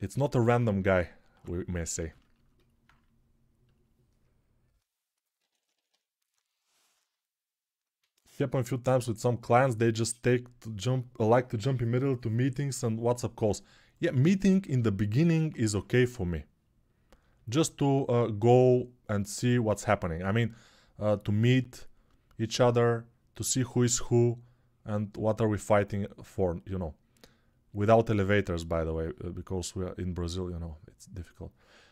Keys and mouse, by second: 0.3-1.2 [, 2.3-14.2 alt+drag, 5.2 [, 5.3 [, 5.5 [, 5.6 [, 5.7-8.7 right drag, 20.0 alt+q, 20.0-31.9 drag.